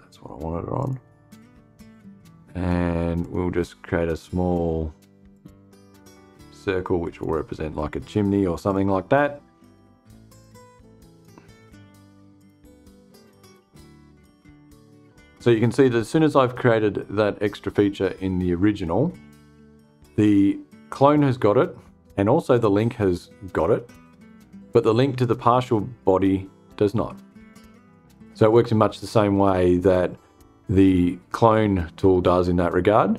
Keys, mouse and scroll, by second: 0.3 click, 2.7 click, 4.8 click, 6.5 click, 8.2 click, 9.8 click, 11.9 click, 14.4 click, 14.8 space.